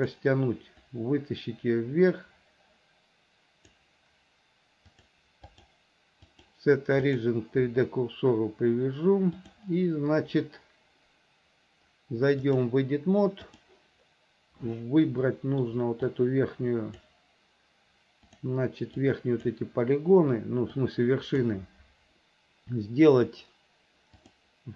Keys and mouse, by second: 1.1-3.9 drag, 5.1 click, 5.6-7.4 drag, 9.6 click, 12.7-13.9 drag, 15.4 shift+middle click, 16.3 click, 18.6-19.6 drag, 21.1 click, 24.4 click.